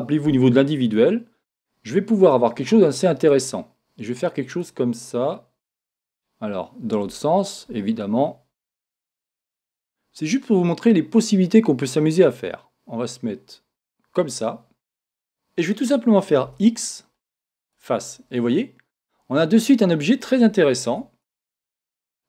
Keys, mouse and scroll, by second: 0.8 click, 3.5 click, 5.3 click, 16.4 x, 18.3-20.2 middle drag, 20.9 Tab, 21.2-22.2 middle drag.